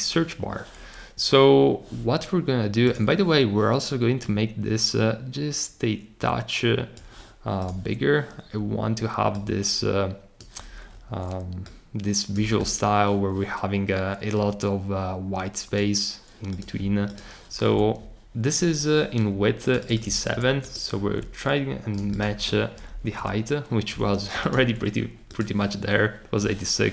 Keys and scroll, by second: 20.3 super+c, 23.0 Up.